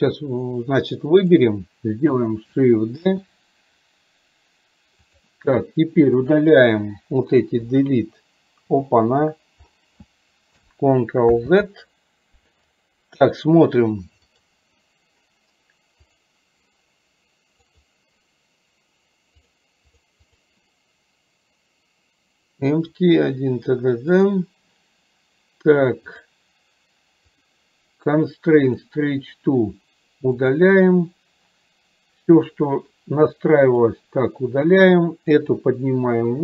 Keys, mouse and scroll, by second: 0.9 click, 3.2 shift+d, 6.3 click, 14.3 click, 16.2 drag, 24.3 click, 26.1 click, 27.4 click, 30.4 click, 32.3 click, 33.8 click, 35.7-36.4 drag.